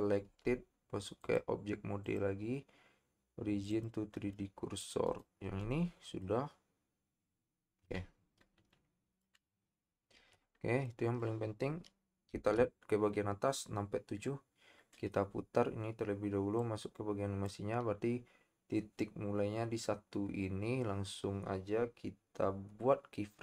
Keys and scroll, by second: 0.2 Tab, 12.3 KP_7.